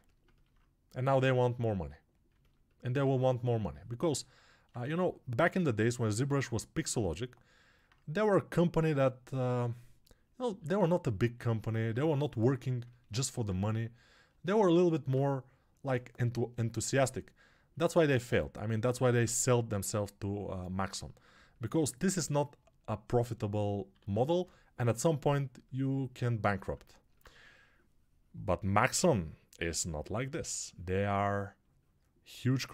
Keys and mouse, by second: 10.4 alt+q, 20.7-26.9 ctrl+alt+right drag, 23.9 alt+q, 24.7 6, 26.9-32.7 alt+drag, 27.2 2, 30.2 1.